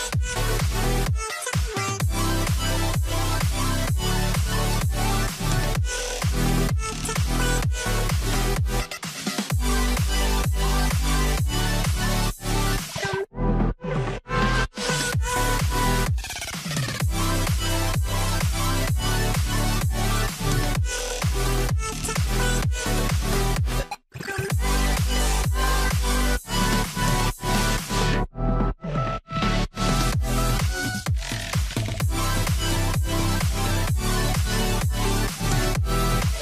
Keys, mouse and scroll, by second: 0.1 double click, 4.2 double click, 7.4-9.2 typing, 8.3 Return, 11.1 ., 11.9 Return, 19.2 5, 22.3 4, 22.4 Return, 24.4 middle click, 34.3 middle click, 34.4 scroll down 1, 35.2 ctrl+click, 35.8 middle click.